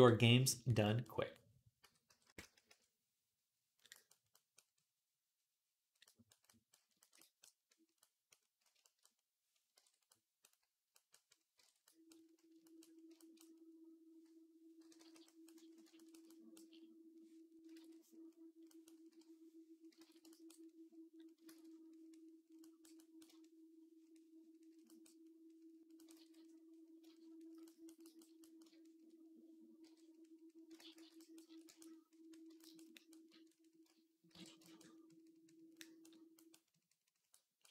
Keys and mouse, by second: 1.6-2.4 typing, 3.7 ], 8.8-10.9 drag, 9.6 ctrl+Tab, 11.4 ctrl+Tab, 11.7 middle click, 11.9 middle click, 12.0 middle click, 12.6 middle click, 12.8 shift+middle click, 13.0-15.3 drag, 14.6 [, 14.8 [, 14.9 [, 16.4 d, 17.6 ctrl+z, 18.6-27.7 drag, 18.9 i, 19.8 ctrl+z, 21.3 ctrl+z, 26.0 ctrl+z, 30.6 ctrl+z, 30.8 ctrl+z, 34.1 alt+q, 35.6-37.7 drag.